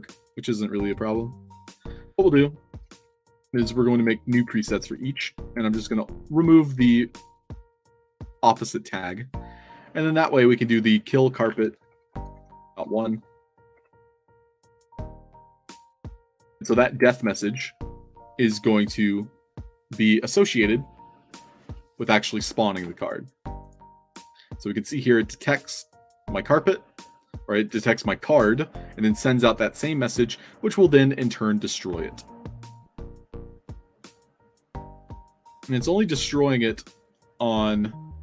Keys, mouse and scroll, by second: 1.6-2.5 typing, 1.6 click, 2.6 ctrl+d, 3.6-4.9 shift+drag, 6.0 click, 7.2 click, 8.2 click, 8.8 middle click, 10.5 click, 11.5-13.9 typing, 15.0 click, 16.5-17.2 drag, 23.6 click, 24.3 scroll up 2, 25.6 click, 26.8 scroll up 2, 30.1 click.